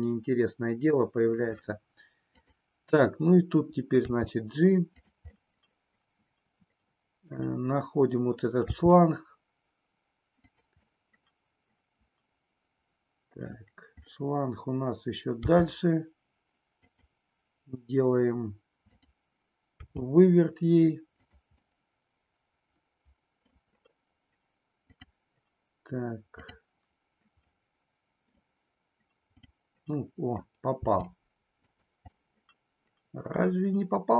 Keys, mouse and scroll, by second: 2.4 click, 3.9 g, 5.4-7.4 middle drag, 8.7 g, 10.4 click, 11.0 scroll up 1, 11.0-13.6 middle drag, 15.4 g, 16.8 click, 18.8 click, 19.8 g, 21.3 click, 21.6-23.6 middle drag, 24.9 click, 26.3 click, 27.4 middle click, 30.8 g, 32.2-34.1 middle drag.